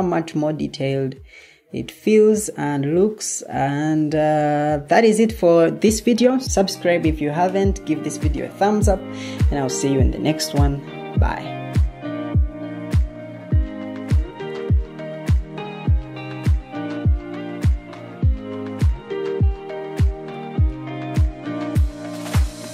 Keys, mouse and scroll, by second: 3.8-6.4 middle drag.